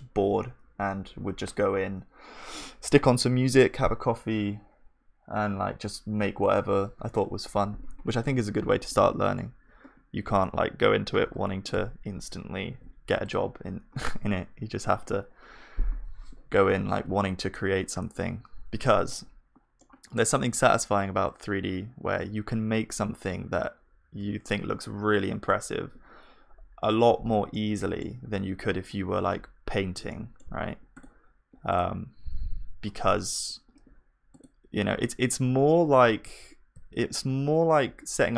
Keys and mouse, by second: 8.9 middle click, 8.9-12.7 right drag, 9.6-16.1 drag, 12.7 ctrl+s, 25.9 KP_1, 27.5-35.9 middle drag, 35.9 shift+d.